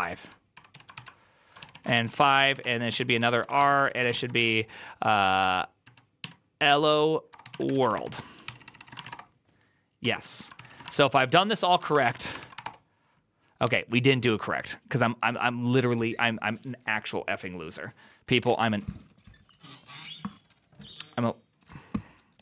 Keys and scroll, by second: 0.6 typing, 0.8 ctrl+c, 1.5 ctrl+a, 1.6 ctrl+a, 1.7-12.2 typing, 11.3 ctrl+u, 12.3 ctrl+c, 12.5 Return, 12.5 ctrl+a, 12.5 Up.